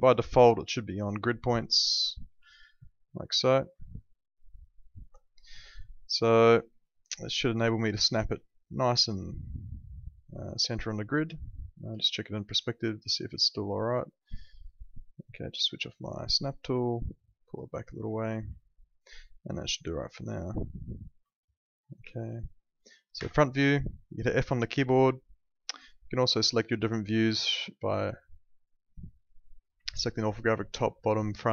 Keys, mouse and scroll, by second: 0.0 right click, 2.2 ctrl+2, 5.0 Escape, 6.5 click, 11.9 p, 12.6 alt+middle click, 13.4 alt+middle click, 15.8 click, 18.6 alt+middle click, 21.3 alt+middle click, 22.1 alt+middle click, 23.1 f, 26.4 click.